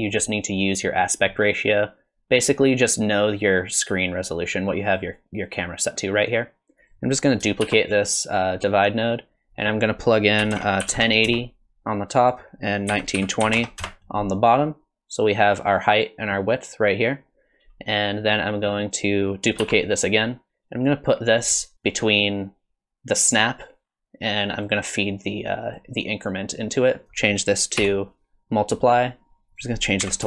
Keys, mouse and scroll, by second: 6.8 click, 7.7 shift+d, 9.5 click, 12.3 click, 19.6 shift+d, 25.3 click, 27.0 click, 29.5 click.